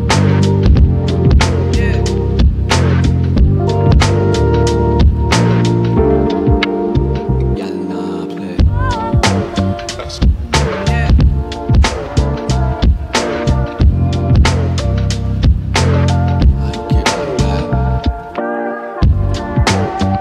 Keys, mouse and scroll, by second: 3.4 click, 7.4 click, 7.8 click, 10.5 click, 11.4 typing.